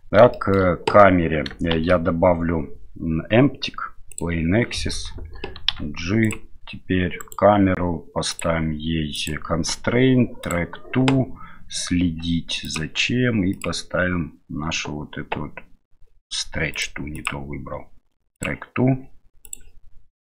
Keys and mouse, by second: 0.4 shift+middle click, 1.7 shift+a, 5.7 g, 7.2 right click, 9.2-10.5 drag, 12.6 click, 17.1-18.4 drag.